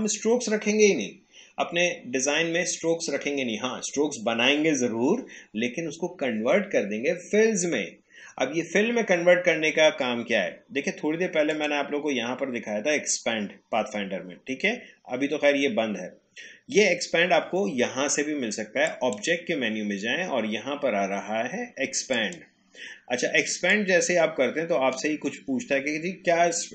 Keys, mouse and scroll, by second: 11.5 click, 18.8 click, 22.1-26.7 drag.